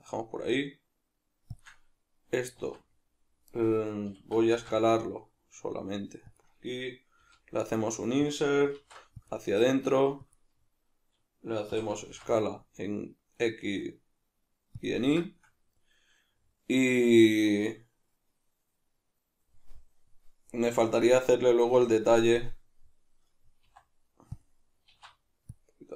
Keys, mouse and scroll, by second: 1.6 shift+click, 2.6 alt+s, 3.6 right click, 4.1 s, 6.4 click, 8.4 click, 8.8 alt+e, 10.4 click, 11.7 s, 14.9 click, 15.2-24.4 shift+middle drag, 24.4 click, 24.9 alt+e.